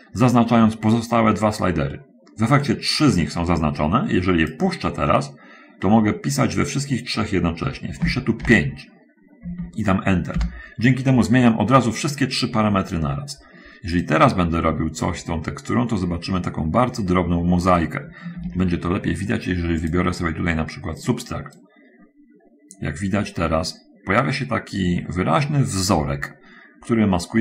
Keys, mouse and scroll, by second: 8.4 5, 10.7 Return, 14.4-18.1 drag, 18.7 ctrl+z, 20.2 click, 21.3 click, 21.9-27.4 drag.